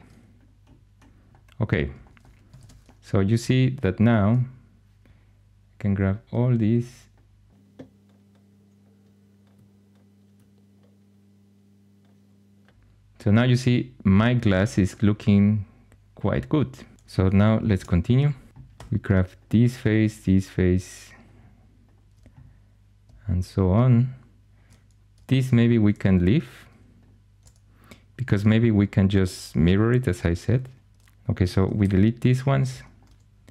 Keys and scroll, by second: 2.5 shift+super+e, 17.6 shift+super+e, 18.6 3, 31.7 shift+x.